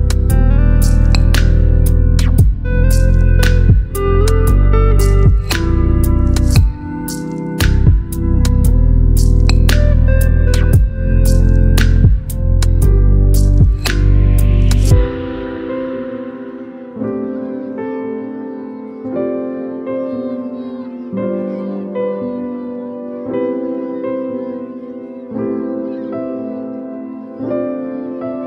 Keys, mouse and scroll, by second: 1.9 Return, 2.0-6.6 drag, 8.9-10.0 alt+drag.